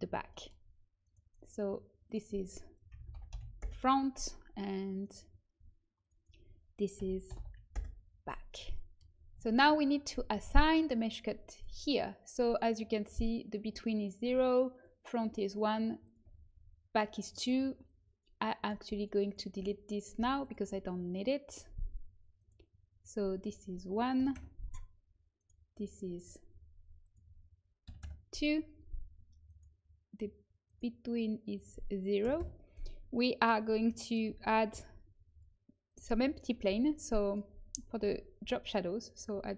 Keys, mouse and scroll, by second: 1.3-2.7 right drag, 2.0 click, 3.5-4.9 drag, 4.9-5.9 right drag, 7.6-8.7 drag, 11.5-15.8 drag, 15.8-20.1 right drag, 20.1 Delete, 22.3-33.1 right drag, 23.5-25.3 drag, 26.2-27.2 drag, 31.5-33.1 drag, 34.6 shift+a, 36.6 s, 37.9 z, 38.3 s.